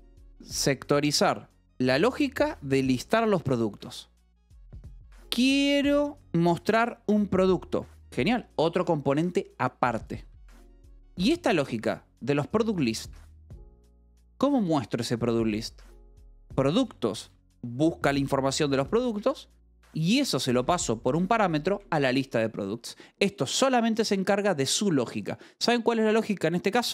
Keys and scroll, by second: 4.8 j, 5.2 v, 5.8 e, 10.5-11.6 typing, 15.7-17.7 typing, 19.0 Escape, 19.5 j, 19.9 h, 20.4 v, 21.0 e.